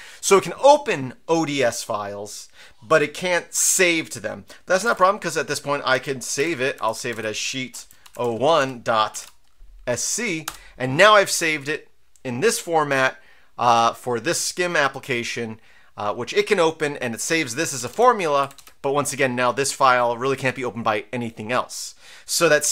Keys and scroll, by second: 4.5-9.7 typing, 10.4 Return, 17.6 Down, 17.8 Down, 17.9 Down, 18.4 Up, 18.5 Up.